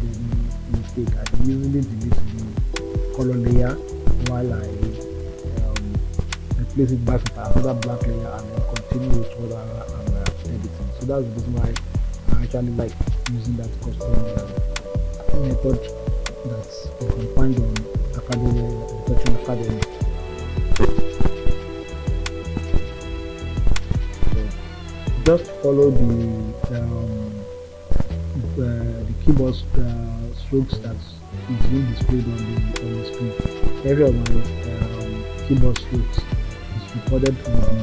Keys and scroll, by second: 23.6 ].